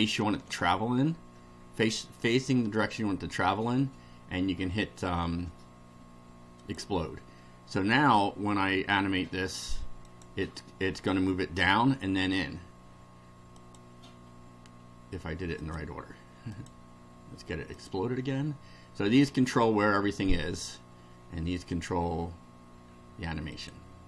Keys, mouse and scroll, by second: 6.6 click, 10.0 click, 13.6 click, 15.6 click, 16.5 click, 17.8 click, 23.5 click.